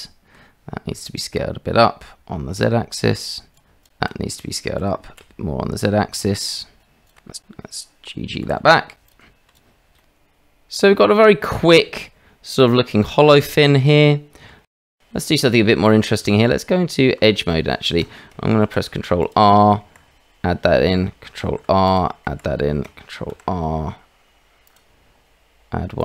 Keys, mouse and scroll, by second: 0.9 s, 3.8 alt+click, 5.2 s, 8.4 g, 9.3 Tab, 9.6 click, 10.0-14.5 middle drag, 15.0 Tab, 15.3-15.7 shift+drag, 16.2 Tab, 18.6 ctrl+r, 21.4 ctrl+r, 23.3 ctrl+r.